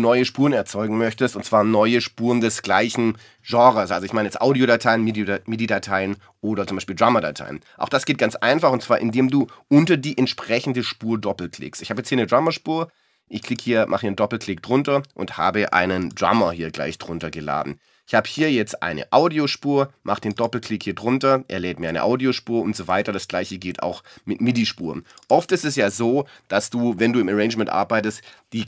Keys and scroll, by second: 16.4 BackSpace, 21.9 BackSpace.